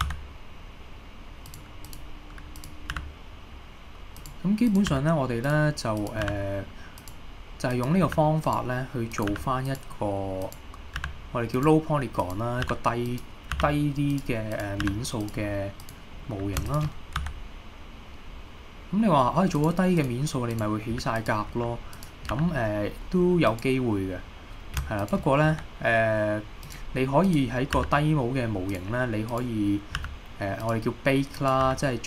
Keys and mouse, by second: 0.1 e, 1.5 click, 1.9 click, 2.6 click, 2.9 g, 4.2 click, 5.0 g, 5.5 click, 6.3 g, 7.0 click, 8.1 g, 8.5 click, 9.2 click, 9.3 g, 9.7 click, 11.1 g, 11.6 click, 12.3 click, 12.7 g, 13.1 click, 13.6 g, 14.1 drag, 14.8 g, 15.3 click, 17.2 e, 19.6 click, 20.5 click, 22.0 click, 22.4 g, 23.5 click, 25.5 e, 26.7 drag, 27.3 click, 27.8 g, 28.7-29.5 drag, 30.1 g, 30.6 click, 31.4 click, 31.7 g.